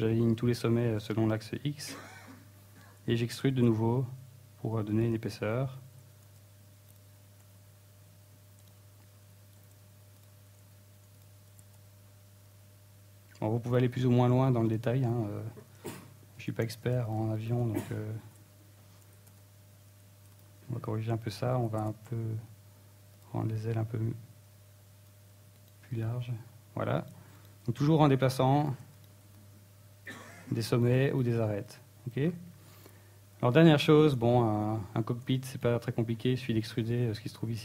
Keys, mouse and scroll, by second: 1.4 click, 1.9 s, 3.7 e, 4.5 right click, 4.6 z, 6.1 g, 7.4 click, 7.6 middle click, 8.0 g, 9.3 click, 9.6 e, 10.9 right click, 11.1 x, 11.9 g, 12.5 click, 12.9 s, 13.5 click, 13.8 g, 16.1 click, 16.2-16.8 scroll down 2, 16.4 middle click, 16.8 scroll up 3, 17.0 shift+middle click, 18.7 ctrl+Tab, 19.4 alt+shift+right click, 20.2 x, 21.2 g, 22.4 click, 22.6 middle click, 22.8-23.5 scroll down 2, 23.5 g, 25.2 click, 25.4 middle click, 26.1 scroll up 2, 26.3 middle click, 27.4 right click, 27.8 right click, 28.0-28.4 scroll up 3, 28.4 scroll down 1, 28.7 right click, 29.1 shift+right click, 29.7 right click, 30.2 right click, 30.5 shift+right click, 31.1 click, 32.4 right click, 32.8 shift+right click, 33.3 click, 34.0-34.4 scroll down 6, 34.4 Tab, 34.4 middle click, 35.1-35.5 scroll up 3, 35.5 shift+middle click, 35.7 Tab, 35.7 middle click, 36.2 ctrl+Tab, 36.9 right click, 37.2 e.